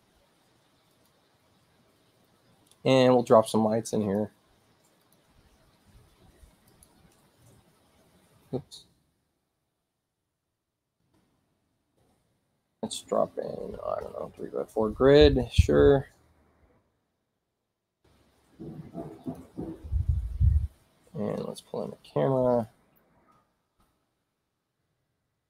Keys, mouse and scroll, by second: 0.9 click, 4.0 click, 5.0 click, 5.7 space, 6.7 click, 8.6 space, 9.4 click, 10.4 k, 11.4 ctrl+k, 14.7 click, 16.2-17.7 right drag, 19.2 click, 22.6 click, 23.8 click.